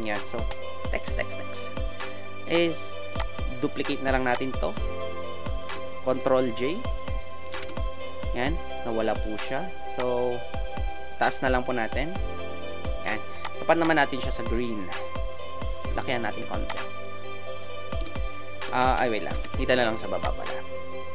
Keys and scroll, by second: 7.5 ctrl+j, 18.8 ctrl+shift+z, 19.3 ctrl+shift+Return.